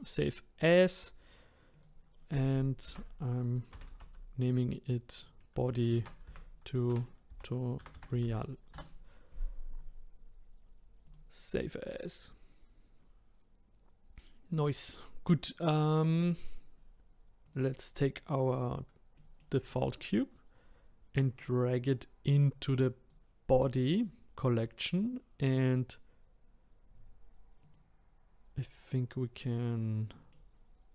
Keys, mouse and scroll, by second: 16.3 click, 17.4 click, 19.1-21.3 middle drag, 21.3 click, 25.4 click, 27.6 click, 28.9-30.7 middle drag, 30.7-30.9 scroll down 3.